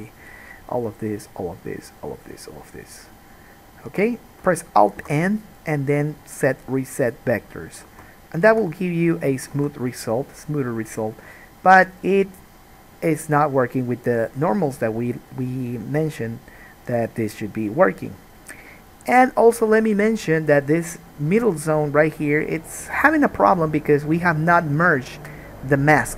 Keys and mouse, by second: 5.2 alt+n, 8.2 alt+a, 8.2-13.2 drag, 8.7 Tab, 9.8 alt+a, 13.2-26.1 right drag.